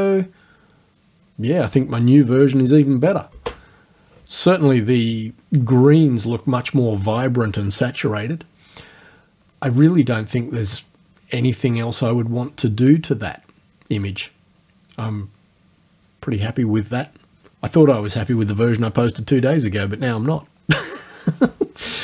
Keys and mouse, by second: 3.3 space.